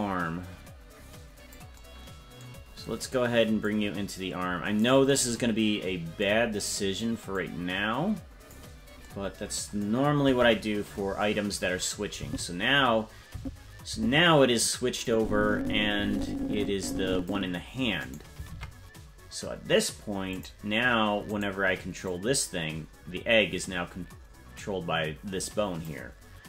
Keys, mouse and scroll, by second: 3.6-4.8 drag, 7.3-8.5 drag, 10.2 KP_0, 12.2 Right, 13.3 Left, 13.9 Right, 15.0-17.3 drag, 18.0 right click, 18.5 ctrl+Tab, 20.3 click, 21.4 right click, 22.0-25.9 drag.